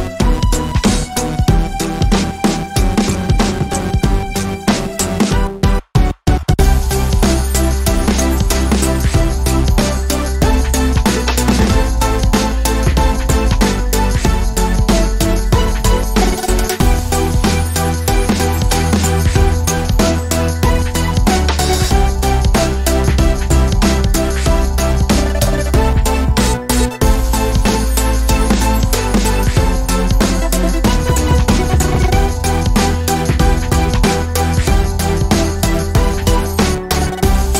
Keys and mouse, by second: 1.9 shift+d, 4.6 shift+d, 7.5 a, 16.3 shift+right click, 20.7 z, 27.4 ctrl+z, 31.9-35.2 drag, 35.3 drag, 35.5-35.9 middle drag, 35.9 z.